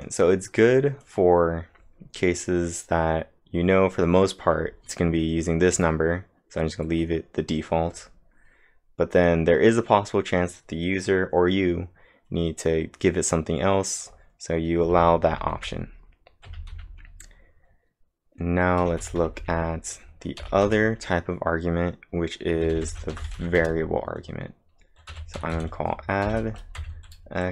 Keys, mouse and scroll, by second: 0.6 click, 0.8-1.5 typing, 1.0 click, 14.6-16.7 typing, 14.8 click, 18.8 j, 20.4 o, 20.7 Return, 22.5-23.9 typing, 25.1 a, 26.2 shift+(, 26.8 x.